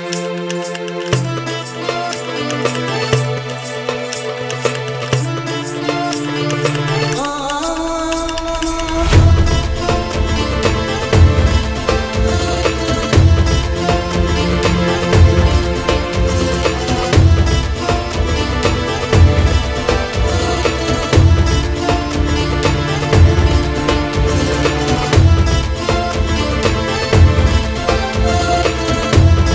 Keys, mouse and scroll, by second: 1.3 KP_7, 2.3 click, 2.6 click, 3.1 shift+d, 3.9 middle click, 4.6 r, 5.4 drag, 5.6-7.1 middle drag, 7.3 click, 7.7 KP_7, 8.2 shift+d, 9.3 s, 10.1-10.4 middle drag, 10.4 KP_1, 11.1 r, 12.1 click, 12.3-12.9 middle drag, 12.9 click, 13.3 KP_3, 13.6 KP_1, 14.1 shift+d, 15.6 s, 16.7 r, 17.8 s, 18.9 click, 19.1-20.6 middle drag, 21.8-22.4 middle drag, 22.4 drag, 22.9 shift+d, 24.0 s, 24.4-25.1 middle drag, 25.1 click, 25.5 shift+d.